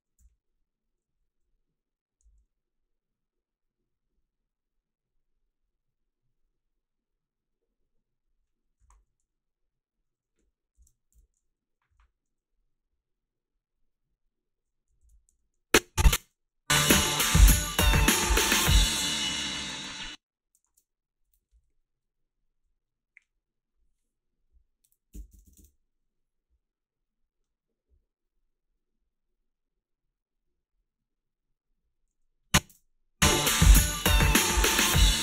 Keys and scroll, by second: 0.2 h, 2.2 a, 8.5-9.4 typing, 10.7 shift+x, 11.1 f, 11.9 i, 15.0 ctrl+r, 15.3 a, 16.1 space, 19.9 space, 24.9-25.8 typing, 32.7 space.